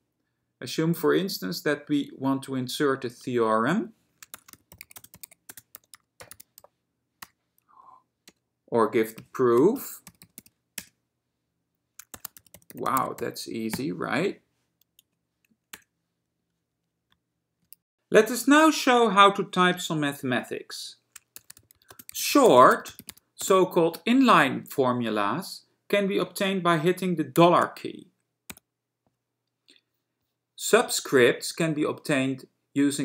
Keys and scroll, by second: 4.3-10.9 typing, 7.9 Down, 12.1-15.9 typing, 21.3-23.7 typing, 25.1 typing, 27.5 shift+4.